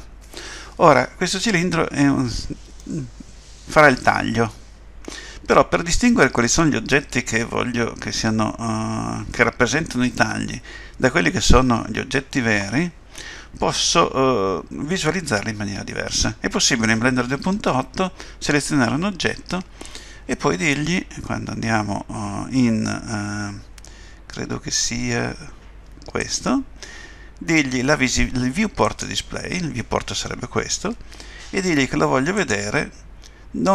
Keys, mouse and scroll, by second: 2.8 middle click, 26.2 click, 28.9 click, 29.5 scroll down 2, 31.9 scroll down 1, 32.3 click.